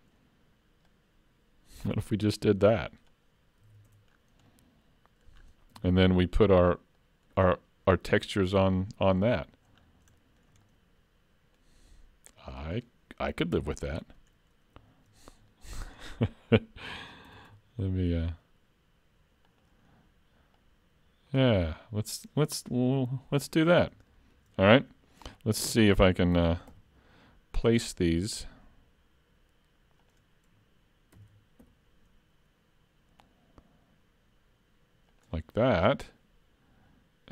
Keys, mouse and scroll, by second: 0.9 click, 3.7 alt+a, 3.9 Tab, 4.1-4.6 scroll down 5, 4.5 middle click, 5.4-5.8 scroll down 2, 5.8 alt+a, 6.0-6.9 scroll up 3, 6.9 scroll up 1, 7.0 middle click, 7.5-7.9 scroll up 2, 8.6-9.1 scroll down 5, 9.8-10.1 scroll down 3, 10.2 shift+middle click, 10.7 middle click, 12.6 click, 13.6 KP_3, 15.5 shift+middle click, 16.0 scroll up 1, 17.3 s, 20.6 click, 23.8-24.5 scroll up 3, 24.5 shift+middle click, 26.4 shift+d, 31.2 shift+d.